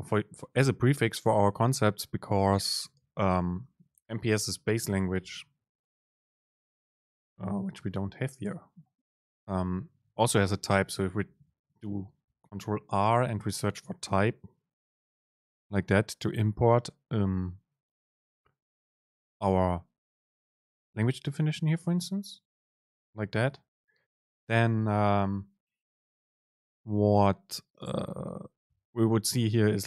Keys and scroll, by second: 3.7 Left, 3.7 super+space, 10.6 ctrl+r.